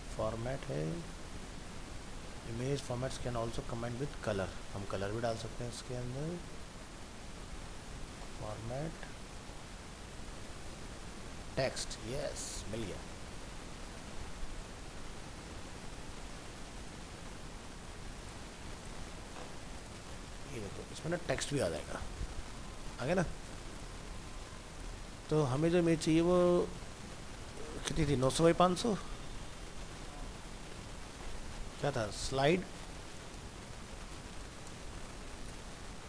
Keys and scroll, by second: 21.4 ctrl+v, 27.2 shift+Left, 30.8 shift+Left.